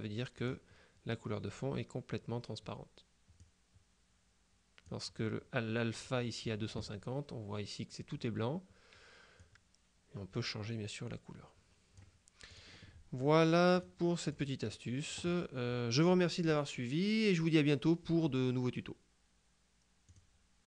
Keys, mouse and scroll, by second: 0.5 click, 3.5-5.4 drag, 9.5-13.1 drag, 13.9-14.9 drag, 20.1 click.